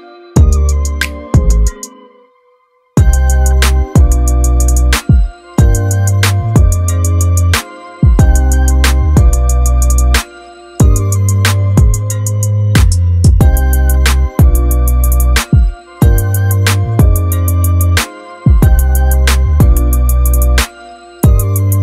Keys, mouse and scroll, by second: 4.9-5.3 scroll up 1, 9.6-13.2 drag, 18.8 click.